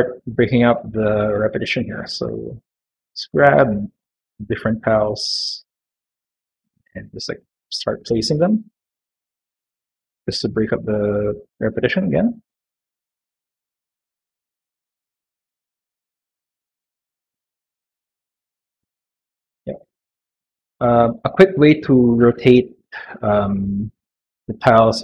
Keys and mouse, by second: 1.2 middle click, 4.0 click, 5.7 click, 8.1 click, 10.0 click, 13.3 click, 15.4 click, 19.0 click, 19.9 click, 23.4 middle click.